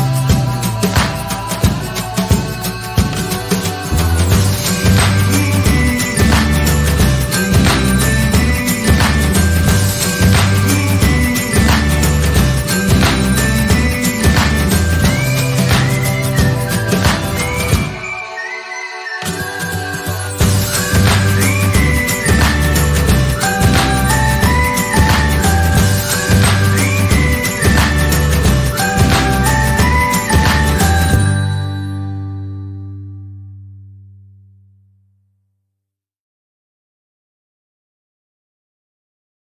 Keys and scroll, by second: 20.4 ctrl+c, 20.6 ctrl+v, 26.0 ctrl+a, 27.1-30.7 typing.